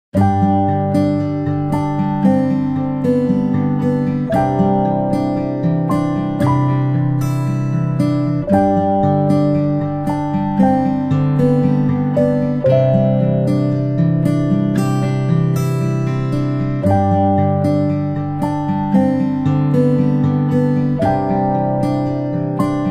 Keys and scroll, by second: 0.1 ctrl+space, 0.1 c, 5.5 ctrl+g, 8.0 p, 11.2 ctrl+z, 11.5 ctrl+z, 13.9 space, 14.1-22.0 space.